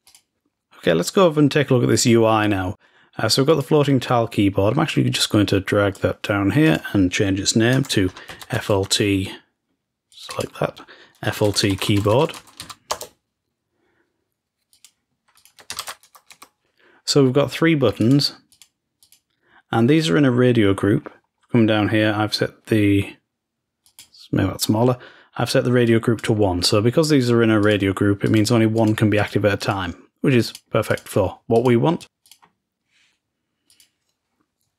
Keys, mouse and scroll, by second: 0.1 click, 3.4-4.6 drag, 5.5-7.6 drag, 10.0 click, 10.2 click, 14.8 click, 15.4 ctrl+shift+click, 15.7 ctrl+shift+s, 17.9-19.2 drag, 20.6-21.9 scroll down 1, 21.9 scroll down 1, 23.8 click, 25.8 click, 27.5 click, 28.2 click, 31.5-33.0 drag, 33.7-34.7 drag.